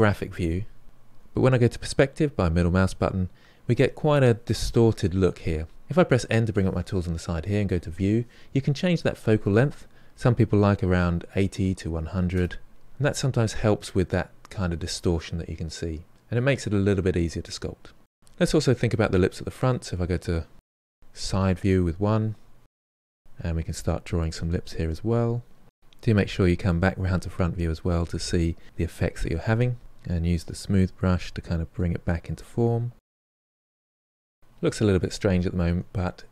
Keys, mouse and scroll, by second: 1.9-5.0 middle drag, 7.7 click, 9.2-12.2 drag, 13.4-16.1 ctrl+middle drag, 18.1 middle click, 18.8 KP_1, 19.4 KP_3, 19.8-21.0 ctrl+shift+middle drag, 21.0 f, 21.3-23.9 drag, 23.9 middle click, 24.3-26.3 drag, 26.3 middle click, 26.8 click, 27.8 middle click, 27.9 shift+click, 28.0 middle click, 28.1 KP_3, 28.3-29.3 shift+drag, 29.3 middle click, 29.4 click, 29.6 middle click, 29.7 shift+click, 30.3 ctrl+middle click, 30.5 ctrl+shift+click, 30.9 shift+middle click, 31.0 ctrl+click, 31.7 ctrl+middle click, 32.0 ctrl+click, 32.1 middle click, 32.2 shift+click, 32.3 middle click, 32.5 click, 32.6 middle click, 32.7 click, 32.8 middle click, 33.0 shift+click, 33.3 middle click, 33.5 ctrl+click, 33.6 middle click, 33.7 shift+click, 33.9 middle click, 34.0 shift+click, 34.1 middle click, 34.6 KP_1, 34.9 KP_3, 35.0 ctrl+middle click, 35.1-36.3 shift+drag.